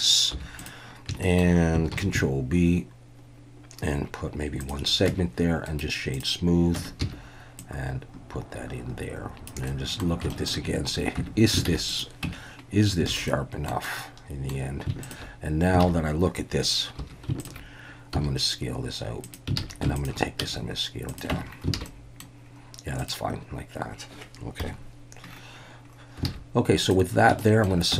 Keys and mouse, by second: 0.3 3, 0.6 drag, 1.2 shift+middle click, 1.9 ctrl+b, 4.6 shift+click, 5.1 Tab, 5.8 right click, 6.8 Tab, 7.0 a, 7.6-9.5 drag, 9.8 middle click, 10.4 shift+middle click, 11.2 Tab, 11.7 alt+a, 11.9 click, 12.2 Tab, 13.1 alt+a, 13.3 middle click, 13.9 middle click, 14.2 click, 15.8 alt+a, 17.0 2, 18.2 s, 19.2 click, 19.6 alt+a, 20.0 alt+shift+click, 20.4 s, 21.1 click, 21.3 Tab, 21.8 alt+a, 21.9-22.2 middle drag, 23.0 drag, 24.6 KP_1, 26.3 alt+a, 27.4 shift+middle drag.